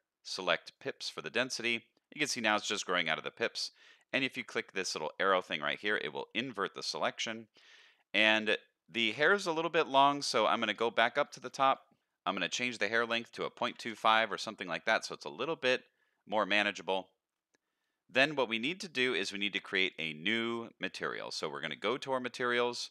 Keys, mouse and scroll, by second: 2.2-2.6 middle drag, 3.2 middle drag, 5.7 click, 6.3-8.1 middle drag, 8.3 middle click, 10.5-12.3 scroll up 13, 11.4 middle click, 12.3-13.9 drag, 14.8-17.3 middle drag, 18.2-19.3 scroll down 4, 19.9 click, 20.8-22.9 scroll up 9.